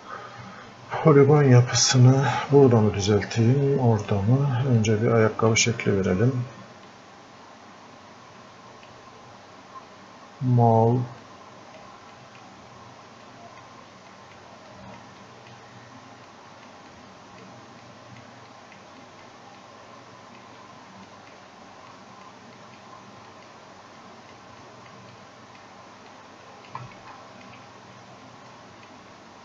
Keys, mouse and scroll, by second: 1.7-4.3 drag, 5.2 click, 6.9-11.3 drag, 11.3-26.1 drag, 26.1 click, 27.1-28.5 alt+drag, 28.5 click.